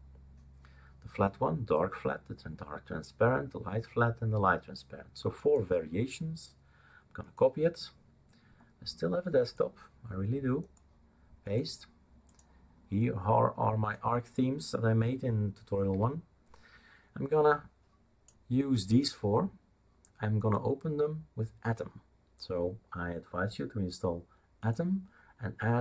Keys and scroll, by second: 15.9 Delete.